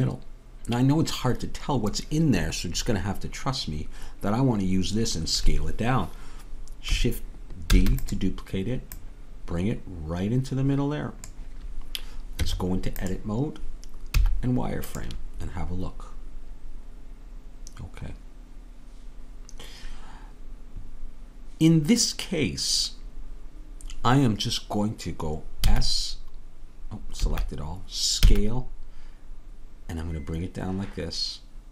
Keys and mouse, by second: 7.8 shift+d, 9.0-10.9 drag, 12.4 Tab, 14.1 z, 25.6 s, 28.2 s.